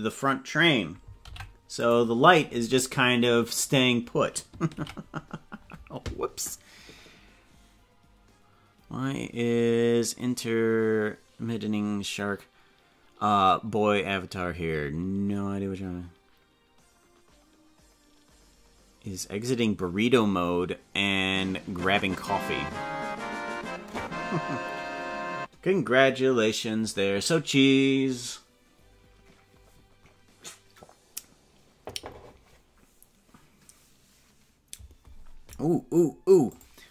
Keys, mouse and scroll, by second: 1.2 ctrl+p, 5.2 ctrl+s.